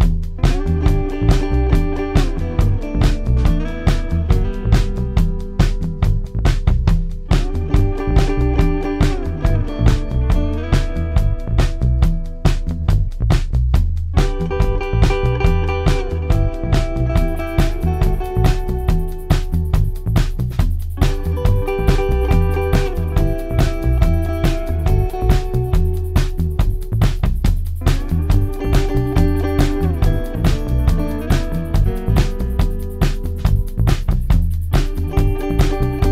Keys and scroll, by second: 0.4 ctrl+d, 0.5 Escape, 8.0 ], 11.0 ], 13.9 ], 26.0 ], 27.2-28.8 typing, 30.3 4, 34.0 0, 34.2 Return, 34.9 0, 35.0 Return.